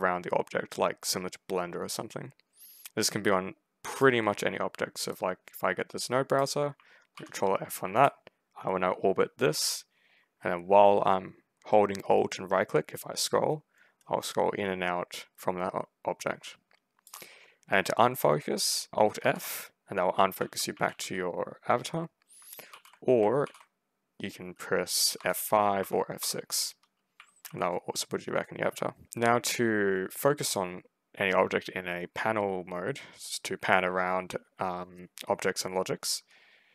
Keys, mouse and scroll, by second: 5.0-6.2 right drag, 7.0 ctrl+f, 7.9-16.9 alt+right drag, 8.9 alt+scroll up 2, 19.1 alt+f, 20.0-21.2 typing, 22.5 alt+f, 23.3 ctrl+f, 25.0 F5, 25.7 F6, 26.0 F6, 26.8-27.8 typing, 36.6 r.